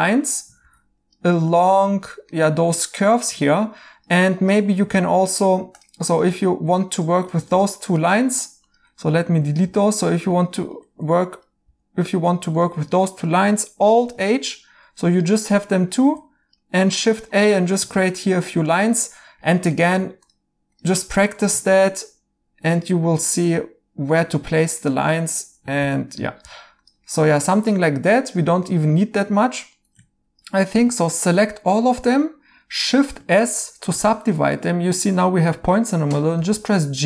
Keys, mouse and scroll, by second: 0.0 right click, 2.3 right click, 9.2 x, 11.6 x, 14.0 h, 16.0 a, 17.3 right click, 17.9 a, 19.4 right click, 20.5 a, 21.1 right click, 21.7 a, 23.4 right click, 25.8 a, 27.1 right click, 33.9 s, 36.3 g.